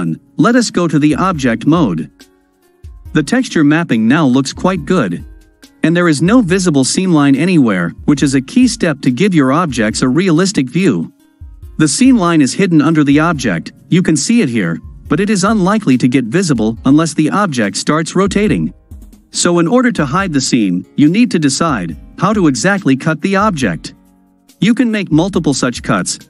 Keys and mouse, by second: 0.2-1.3 drag, 2.3-5.0 middle drag, 5.3-6.6 middle drag, 8.7-9.7 ctrl+middle drag, 10.2-11.9 middle drag, 15.6-20.0 middle drag, 20.9-22.2 middle drag, 22.5-23.3 ctrl+drag, 23.4-25.3 middle drag, 25.3-25.8 drag, 25.8-26.2 middle drag.